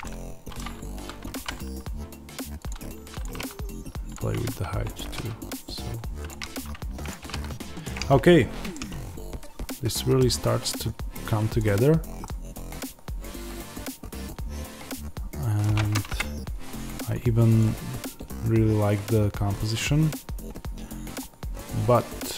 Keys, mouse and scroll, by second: 1.3 g, 2.6 click, 3.2 g, 4.0 click, 4.9 g, 6.2 click, 7.1 g, 7.7 click, 8.7-22.3 middle drag, 10.3-11.5 scroll up 1, 11.5 click, 11.8-12.1 scroll down 1, 16.0 KP_0, 16.7-17.5 scroll down 1, 17.5 click, 18.0-22.3 scroll up 1.